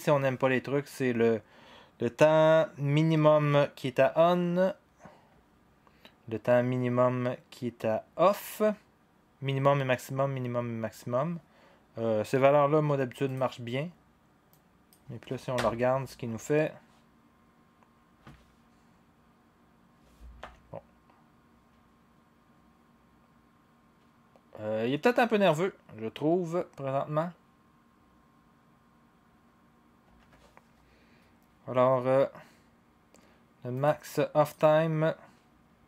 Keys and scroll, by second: 15.5 0, 20.4 0, 30.0 0.